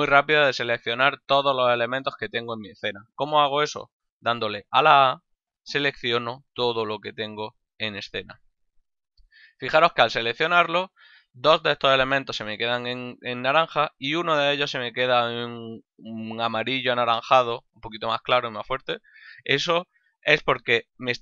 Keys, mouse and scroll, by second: 4.3 a.